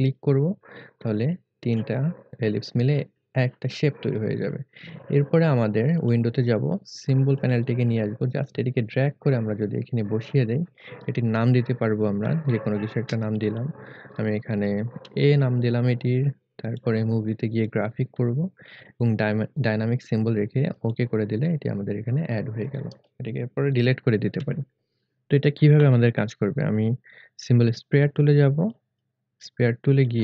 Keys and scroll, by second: 15.0 a, 24.4 Delete.